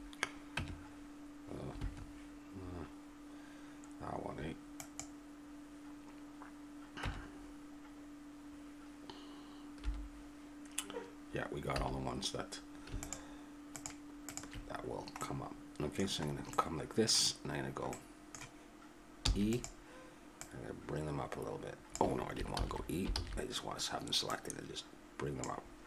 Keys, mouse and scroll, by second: 0.5 Tab, 4.8-7.0 right drag, 7.0 Tab, 11.8 a, 13.0-14.9 right drag, 14.9-17.7 middle drag, 19.2 e, 20.4-22.3 drag, 22.5 ctrl+z, 23.2 ctrl+z, 24.3-25.8 drag.